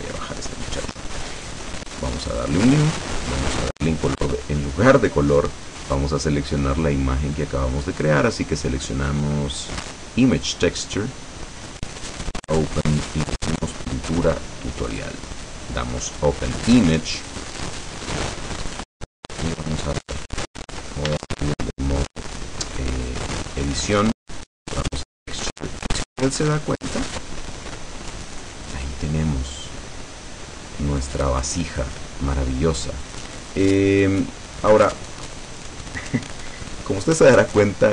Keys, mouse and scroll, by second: 0.0-1.2 drag, 2.4 click, 5.8 click, 10.5 click, 12.2 click, 13.6 click, 15.0 click, 17.5 click, 19.9 click, 21.2 Tab, 23.9 click, 24.9 click, 26.1-36.3 middle drag.